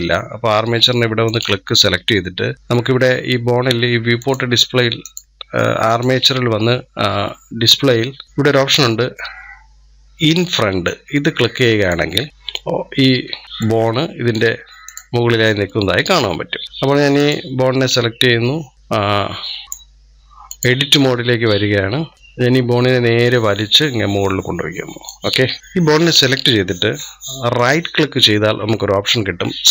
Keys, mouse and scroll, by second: 1.1 click, 4.0-5.8 drag, 10.6 click, 13.1-13.4 scroll up 5, 13.4-14.7 shift+middle drag, 14.7-15.9 drag, 16.3-16.7 scroll down 4, 16.9-17.6 drag, 17.6-18.1 scroll up 1, 19.6-21.3 drag, 21.3 scroll up 1, 21.9 scroll down 2, 22.1 click, 25.6 click, 27.4-29.7 right drag.